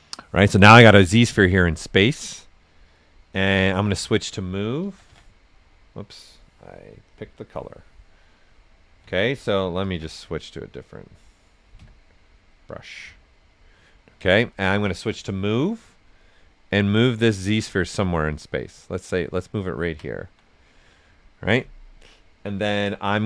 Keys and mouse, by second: 1.2 click, 1.8 right click, 3.5 w, 3.9 right click, 4.6-5.5 typing, 7.0 click, 9.0-10.4 typing, 11.7 q, 15.1 click, 17.2 right click, 18.3-19.6 drag, 19.6 ctrl+right click, 20.6 right click.